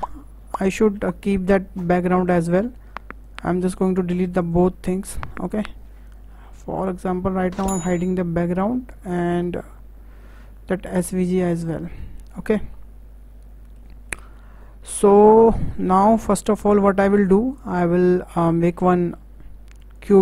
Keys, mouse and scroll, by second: 0.0 click, 0.4-0.8 scroll down 4, 0.8-2.9 shift+middle drag, 2.9-3.2 scroll up 2, 3.2 click, 3.8 click, 4.4 shift+click, 5.4 Delete, 6.0 click, 8.4 click, 11.0 click, 11.6-12.0 scroll up 1, 12.0-12.6 shift+middle drag, 12.6 scroll down 1, 12.7-15.9 middle drag, 15.9-16.3 scroll up 4, 16.3-18.6 shift+middle drag, 18.6 shift+a.